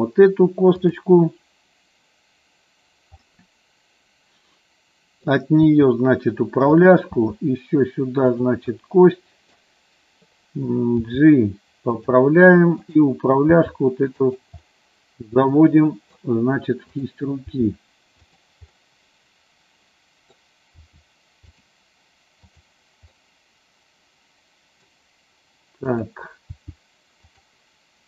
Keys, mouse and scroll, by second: 0.7 click, 3.2-5.3 middle drag, 5.6 e, 6.8 click, 7.1 e, 8.2 click, 8.7 middle click, 11.0 g, 12.0 click, 13.3 g, 14.3 click, 14.6-16.3 middle drag, 16.9 click, 17.5 g, 18.1 click, 18.7-20.4 middle drag, 20.7 g, 21.5 click, 23.1-24.9 middle drag, 26.0 click, 26.5 g.